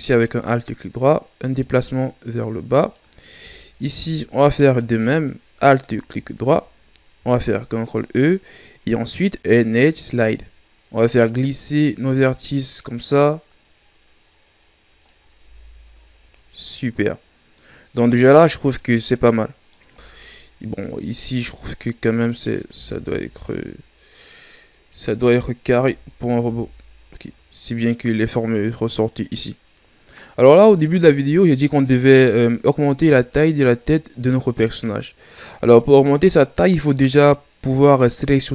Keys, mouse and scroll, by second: 1.0-3.9 drag, 3.9-7.1 alt+right drag, 7.2 ctrl+e, 15.5 Tab, 16.0 scroll down 4, 16.3 a, 16.7-18.5 middle drag, 18.5-19.1 scroll up 3, 19.1 middle click, 20.0 Tab, 21.3 s, 22.8 Tab, 23.0-25.5 scroll down 4, 25.5-25.9 scroll up 1, 25.9 Tab, 26.5 Tab, 26.8-28.5 scroll down 1, 29.6-32.7 scroll down 3, 38.3-38.5 scroll up 1.